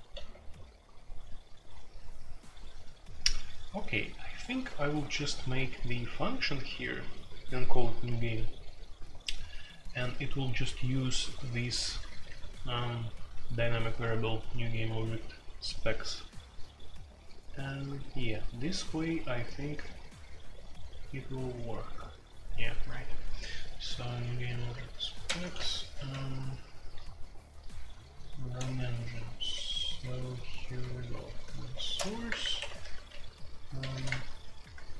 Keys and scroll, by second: 0.0-0.4 typing, 11.3-12.3 typing, 25.2-26.1 typing, 26.1 ctrl+u, 26.5 ctrl+u, 26.9 ctrl+u, 28.4-33.9 typing, 32.2 Return, 32.4 Return, 32.5 Escape, 33.8 Return, 34.0 Return, 34.6 Return.